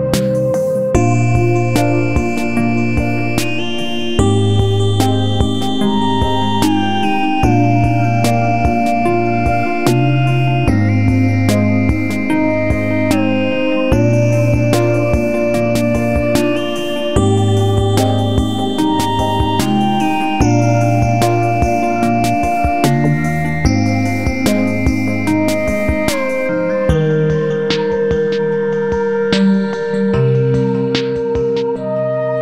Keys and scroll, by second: 7.9 space, 29.0 ctrl+c, 29.2 ctrl+v.